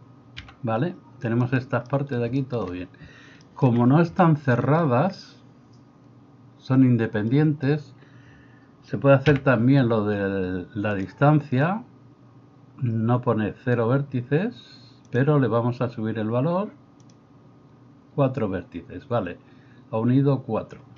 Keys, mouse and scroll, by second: 0.5 g, 9.3 m, 15.3-20.9 drag.